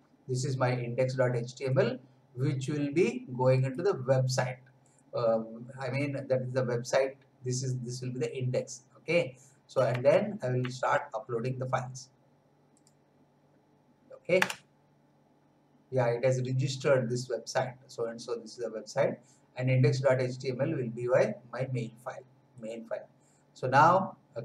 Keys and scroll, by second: 10.1 alt+Tab, 14.3 Return.